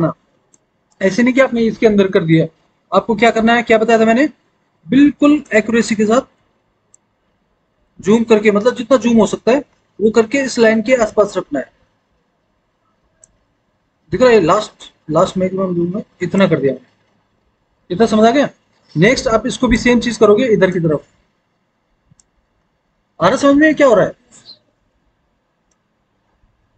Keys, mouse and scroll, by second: 10.9 scroll up 2, 11.0-13.1 drag, 14.3 scroll up 2, 14.6-16.2 drag, 17.5-19.0 scroll down 2, 20.6-22.0 drag.